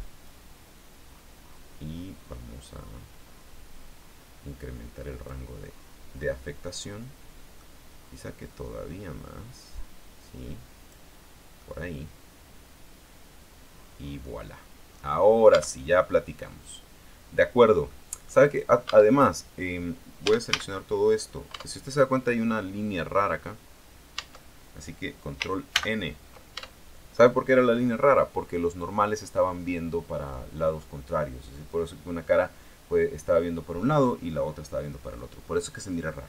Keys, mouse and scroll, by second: 0.4 click, 1.3-2.7 scroll down 3, 2.7-3.1 scroll down 1, 5.7-6.2 scroll down 2, 6.7-7.9 middle drag, 8.6 click, 9.1-9.8 scroll down 2, 11.3-11.7 scroll down 1, 11.7-15.7 middle drag, 15.7 Tab, 16.0-16.5 scroll up 1, 16.7-18.0 middle drag, 18.1 middle click, 18.6 right click, 19.0 Tab, 20.4 a, 21.7 Tab, 24.3 Tab, 25.9 ctrl+n, 26.7 ctrl+Tab, 28.0-28.3 scroll down 2, 28.5-28.9 scroll up 2, 28.9-36.2 scroll down 2.